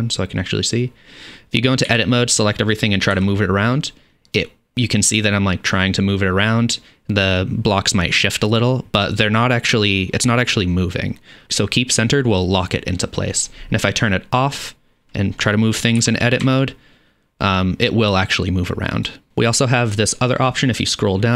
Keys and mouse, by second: 1.9 a, 3.1 g, 14.9-21.3 drag, 16.0 g.